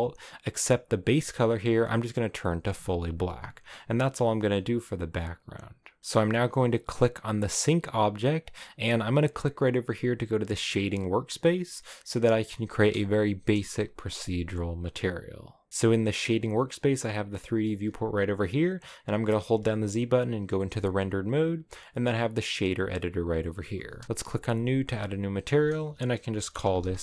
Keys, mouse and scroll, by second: 1.6 click, 5.4 right click, 6.0-6.9 scroll up 1, 6.9-11.4 right drag, 11.4 click, 13.2 KP_0, 15.7-17.3 drag, 17.3-18.1 scroll up 2, 19.8 z, 23.7-27.0 drag.